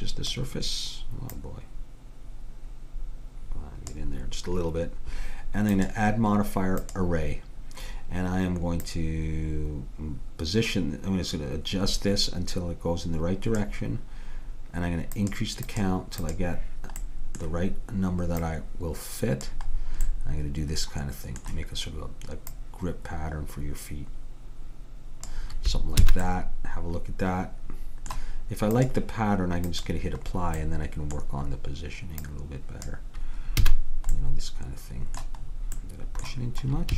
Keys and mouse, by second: 5.8-7.7 drag, 8.9-10.9 drag, 15.2-18.1 drag, 17.1-19.5 middle drag, 18.5-20.4 drag, 20.2-21.9 middle drag, 22.6-24.4 drag, 26.1 a, 26.3-27.8 middle drag, 28.8-31.6 drag, 32.3-34.2 drag, 33.7 a.